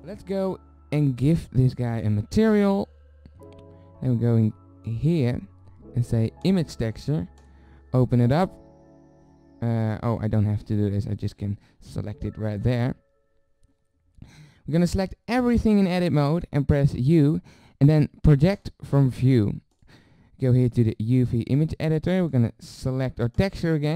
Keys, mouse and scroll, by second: 1.2-3.7 drag, 4.9-7.4 drag, 15.0 a, 17.0 u, 19.7 click.